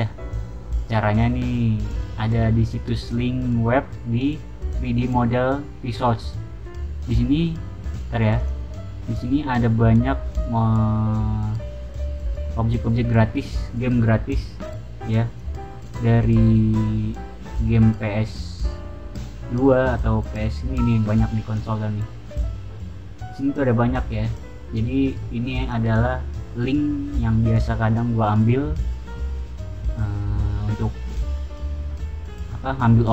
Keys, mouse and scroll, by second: 8.3 click, 9.2 middle click, 9.2-9.8 scroll down 4, 9.6 middle click, 10.2-11.8 middle drag, 10.2-10.8 scroll down 2, 10.8-13.4 scroll down 1, 15.2 click, 15.8 click, 16.4 scroll down 1, 16.9-18.0 scroll down 1, 18.3-19.3 scroll down 3, 23.7-24.6 scroll down 4, 25.5 click, 27.4 scroll down 2, 32.0-32.8 scroll down 2, 32.8-33.1 scroll down 1.